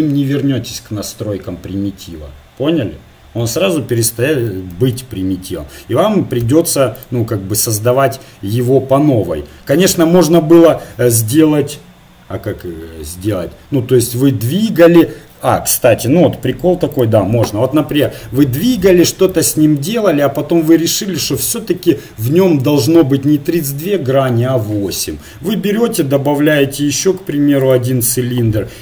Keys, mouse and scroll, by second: 4.7 ctrl+z, 6.4 x, 9.9 shift+a, 18.6-21.1 drag, 25.5 shift+a.